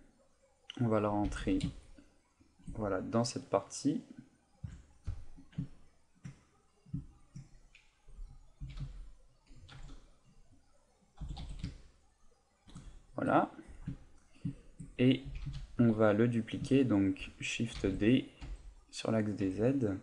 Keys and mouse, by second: 0.7 click, 1.4 g, 2.5 shift+click, 4.6 KP_Decimal, 5.3 middle click, 5.7 ctrl+middle click, 6.4 middle click, 7.0 ctrl+middle click, 7.4 middle click, 8.6 s, 10.6 click, 11.2 g, 13.2 KP_1, 14.0 ctrl+middle click, 14.5 shift+middle click, 15.2 s, 15.9 click, 17.8 shift+d, 19.2 click, 19.4 z, 19.6 middle click.